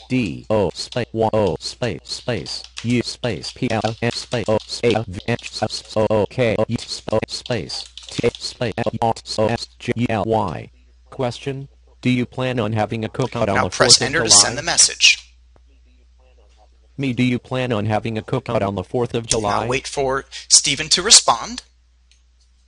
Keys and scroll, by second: 13.5 Return.